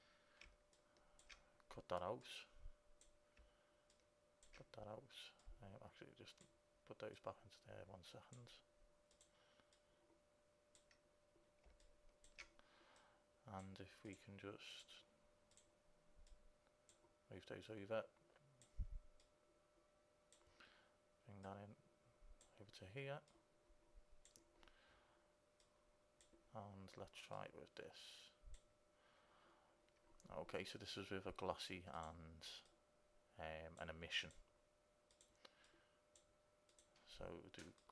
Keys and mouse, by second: 1.4-2.5 drag, 2.6 click, 2.8-4.6 drag, 4.9-9.2 drag, 9.4-12.1 drag, 12.1 click, 16.6-19.8 drag, 19.9 click, 20.1 click, 21.6-25.4 drag, 25.9-29.9 drag, 31.2 middle click, 32.1-34.3 drag, 32.1 right click.